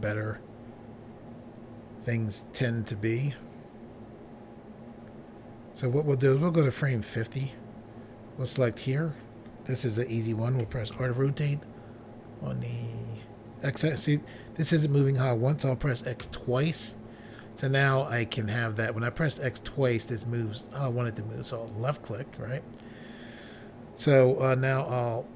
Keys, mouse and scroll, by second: 8.5 click, 8.7 click, 10.6-10.9 typing, 16.2 x, 21.7 click.